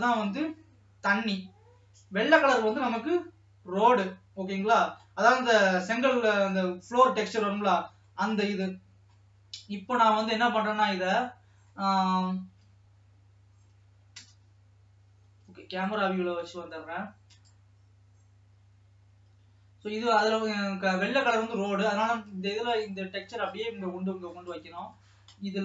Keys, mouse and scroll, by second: 14.3 KP_0.